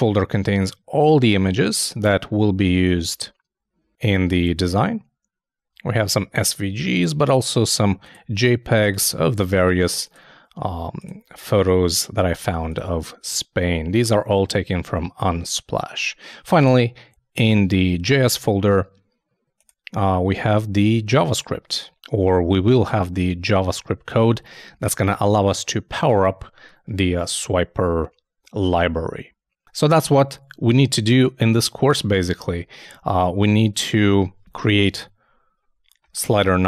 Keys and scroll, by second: 31.0 super+Tab, 34.6 shift+0.